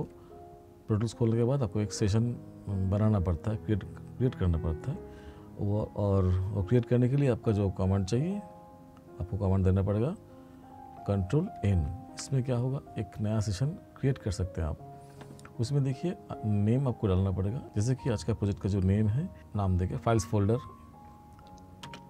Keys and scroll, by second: 11.7 ctrl+n, 21.8 space.